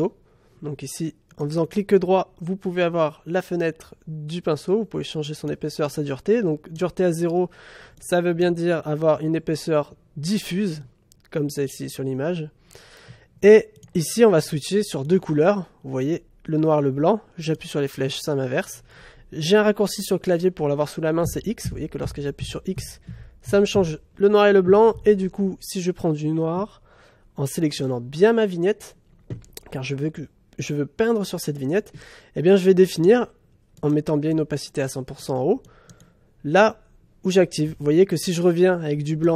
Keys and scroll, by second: 21.2 x.